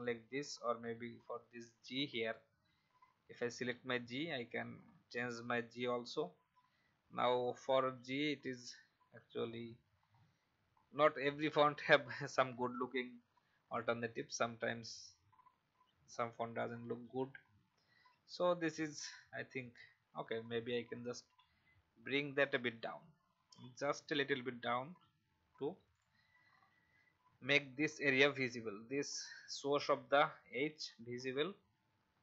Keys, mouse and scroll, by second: 0.9 shift+r, 1.6 t, 2.1 click, 3.6 scroll down 1, 21.3 Down, 24.9 v, 25.9 click, 26.4 alt+scroll up 1, 31.0 alt+scroll down 1.